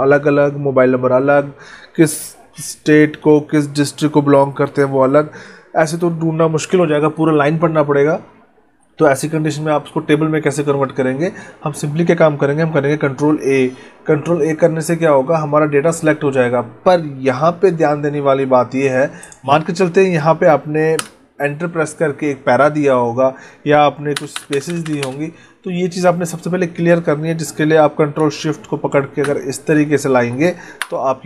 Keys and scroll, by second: 13.0 ctrl+a, 24.1 space, 29.1 ctrl+shift+Left, 30.7 Delete.